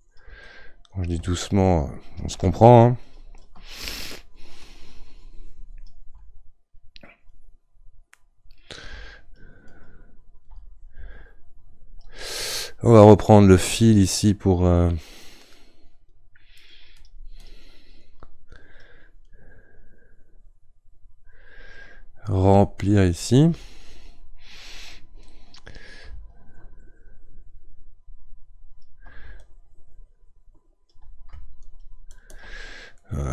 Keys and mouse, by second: 0.4-2.7 middle drag, 2.7-14.8 ctrl+drag, 14.8-16.2 middle drag, 16.2-18.5 right drag, 18.5-22.3 drag, 26.4-33.0 ctrl+drag, 33.0-33.3 middle drag.